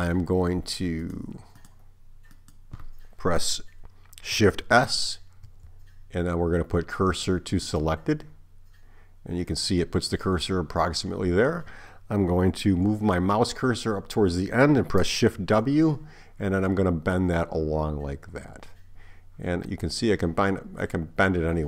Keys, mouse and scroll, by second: 2.4 click, 4.7 shift+s, 5.7 shift+s, 15.4 shift+w.